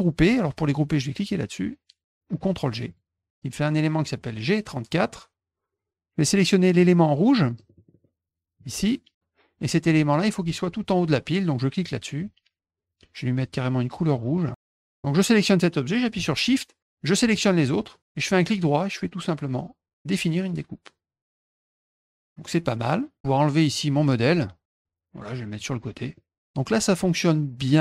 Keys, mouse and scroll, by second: 0.0 middle click, 2.8 click, 6.8 click, 7.5 middle click, 7.7 middle click, 7.9 middle click, 8.6 click, 11.8 click, 14.1 click, 17.2 shift+click, 18.3 right click, 20.3 click, 21.3 click, 22.1 middle click, 23.7-25.6 drag, 26.1 middle click.